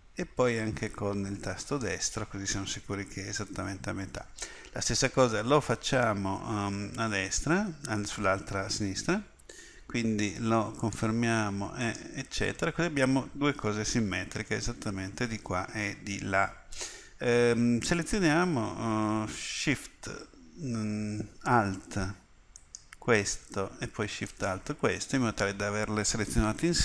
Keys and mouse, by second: 6.5 ctrl+r, 22.6-26.8 drag.